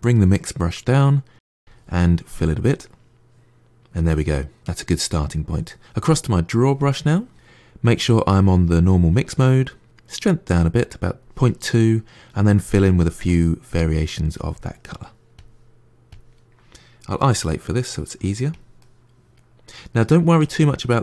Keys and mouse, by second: 1.5 click, 2.5-4.7 middle drag, 6.7-14.6 drag, 14.6 middle click, 15.2-16.5 drag, 17.1 KP_Divide, 17.6 middle click, 18.4 click, 18.6-21.0 middle drag.